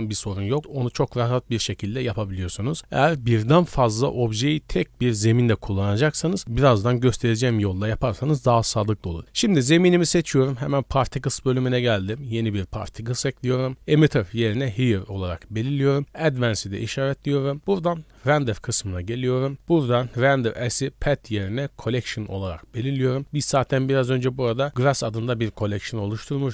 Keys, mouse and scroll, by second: 9.2 right click, 10.6 click, 11.5 click, 12.0 click, 14.5 click, 16.0 click, 16.8 scroll down 1, 18.3 click, 18.7-19.5 scroll down 3, 20.6-22.0 drag, 22.4 scroll down 1, 23.4-24.7 scroll down 1, 26.4-26.5 drag.